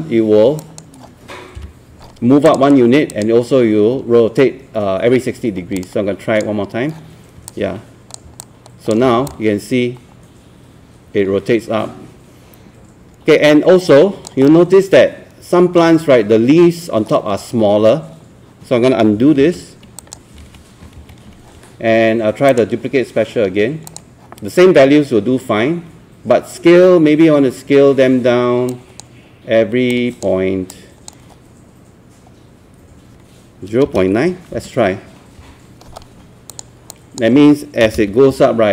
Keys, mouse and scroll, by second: 0.6 click, 1.6 KP_1, 2.5-7.2 drag, 8.4 alt+click, 9.1 scroll down 1, 9.3-14.5 alt+drag, 14.7 alt+middle click, 19.4 ctrl+z, 20.0 click, 20.4 ctrl+z, 21.0 ctrl+z, 22.5 click, 33.9 KP_0, 34.5 KP_Decimal, 35.4 KP_9, 36.5 click, 37.9 KP_0, 38.0 KP_Decimal, 38.3 KP_9.